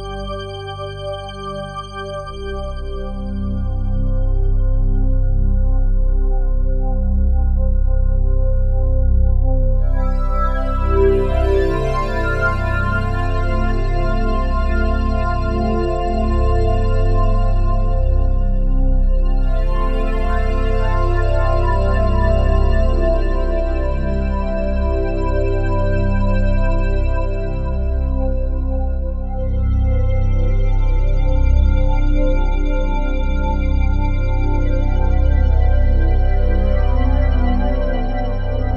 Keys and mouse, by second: 0.0 alt+click, 2.0-3.2 drag, 5.9 ctrl+alt+click, 6.8 click, 7.6 click, 8.2 ctrl+alt+click, 9.1 alt+click, 10.2 click, 11.2 click, 13.8-17.8 typing, 20.4-24.9 drag, 25.2 ctrl+alt+click, 27.0 typing, 27.3 click, 28.3 ctrl+alt+click, 30.8 click, 30.8 typing, 32.1 ctrl+alt+click, 33.0 typing, 33.7-37.5 ctrl+alt+drag, 34.4-35.0 typing.